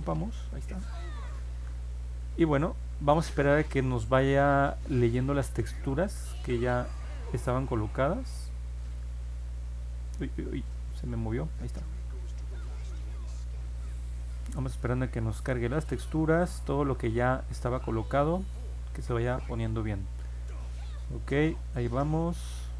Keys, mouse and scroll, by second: 8.3 click, 9.3 scroll down 1, 10.0 scroll up 1, 10.8 middle click, 12.0 middle click, 13.3 scroll down 1, 16.3 alt+middle click, 18.7 middle click, 19.0 middle click, 19.8 middle click, 22.1 middle click, 22.1-22.7 scroll down 2, 22.3 middle click.